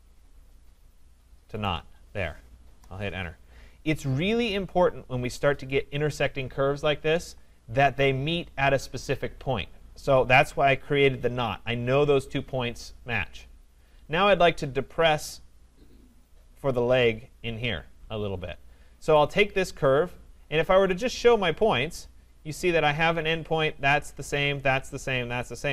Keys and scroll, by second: 2.6 Return.